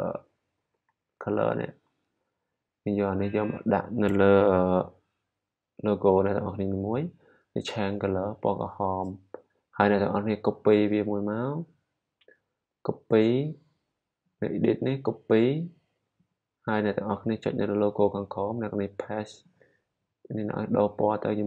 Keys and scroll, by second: 0.3-1.7 typing.